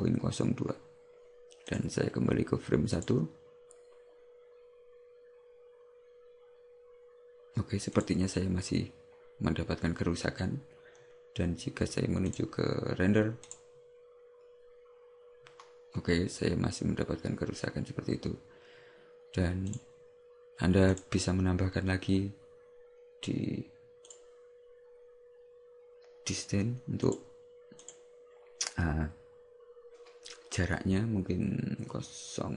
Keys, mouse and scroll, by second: 1.7 click, 8.2 click, 12.3 click, 13.5 click, 21.1 click, 24.1 click, 27.1 click.